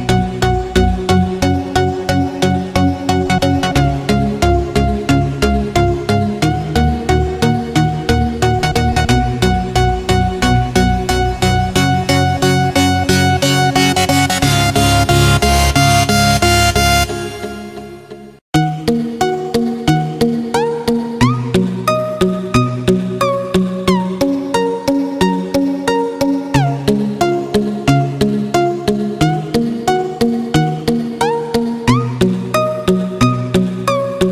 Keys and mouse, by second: 1.6 shift+a, 5.9 s, 7.5 s, 10.7 s, 13.7 s, 17.4 s, 18.8-20.6 middle drag, 22.1-23.5 middle drag, 24.2 click, 25.5 r, 30.6 g.